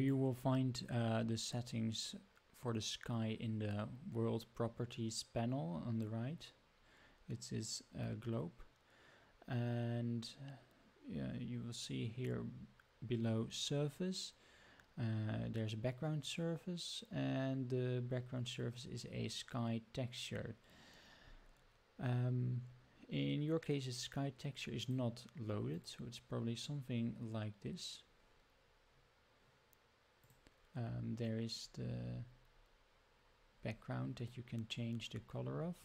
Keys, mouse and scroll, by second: 24.7-25.8 drag, 30.2 click.